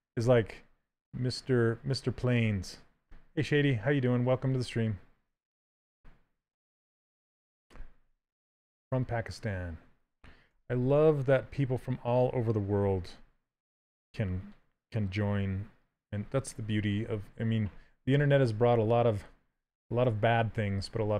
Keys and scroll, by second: 7.4 w, 10.2 q, 17.8 s.